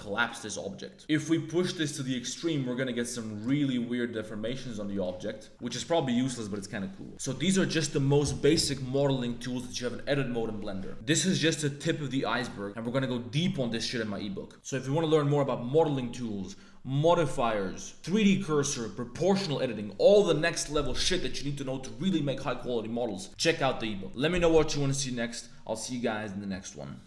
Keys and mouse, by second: 3.6 middle click, 4.7 Tab, 5.0 click.